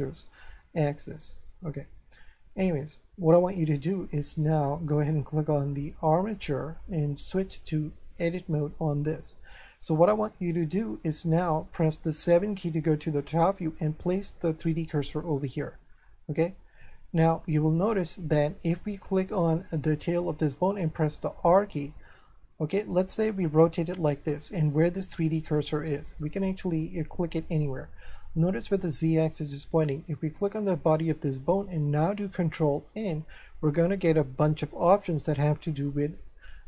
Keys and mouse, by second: 1.6 shift+middle click, 5.7 click, 7.1 click, 8.9 shift+middle click, 9.7 middle click, 11.2 shift+middle click, 14.6 click, 15.3 middle click, 17.3 shift+middle click, 19.6 right click, 20.9 r, 23.4 click, 24.2 shift+middle click, 27.3 click, 30.3 right click, 32.8 ctrl+n.